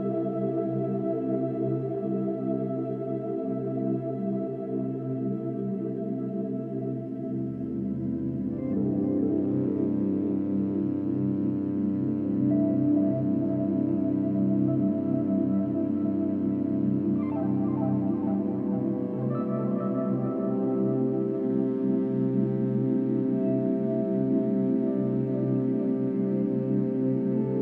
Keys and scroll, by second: 2.8 ctrl+d, 6.2 ctrl+t, 12.2 ctrl+t, 12.4 ctrl+-, 14.7 ctrl+-, 14.9 ctrl+=, 15.3 space, 18.1 space.